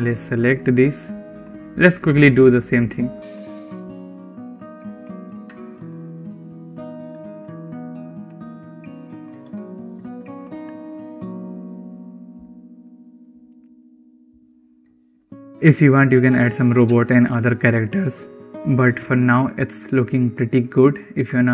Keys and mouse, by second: 1.3-3.3 drag, 3.5 click, 4.2 r, 4.3 ctrl+z, 4.4 click, 4.5 r, 5.1 r, 6.7 drag, 7.3 click, 7.4 click, 7.7 click, 8.6 click, 9.6 click, 10.7 click, 12.5 click, 14.2 r, 14.4 ctrl+z, 14.5 r, 21.4 middle click.